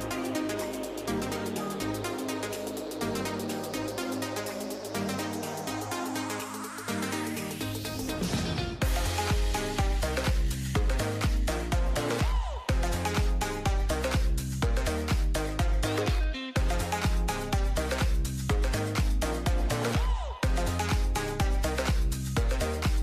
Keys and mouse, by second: 0.4 k, 10.1 a, 11.0 k, 15.5 a, 16.0 a, 16.5 k, 18.8 a, 19.2 k, 20.8 a, 21.4 a, 21.5 w, 21.8 a.